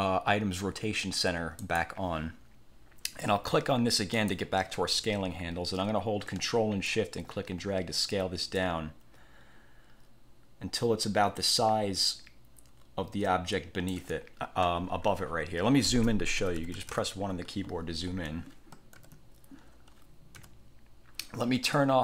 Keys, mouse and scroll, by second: 1.7 click, 4.3 click, 7.0-14.2 ctrl+shift+drag, 16.5 =, 19.1 ctrl+=, 19.8 scroll down 2, 20.5 =.